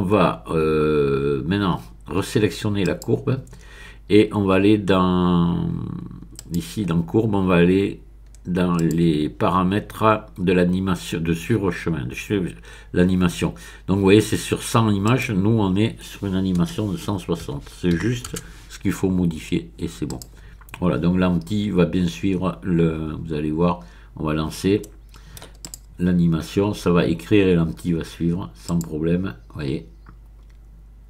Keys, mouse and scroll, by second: 2.8 click, 6.3 click, 7.2-7.8 scroll down 1, 7.8-8.4 scroll down 1, 8.7 click, 9.3-10.5 scroll down 1, 15.0 click, 16.6 BackSpace, 17.5 KP_1, 18.0 KP_6, 18.3 KP_0, 20.1 click, 23.3-24.2 scroll down 1, 24.8 middle click, 25.6 click, 26.2-26.9 scroll up 1, 28.6 click.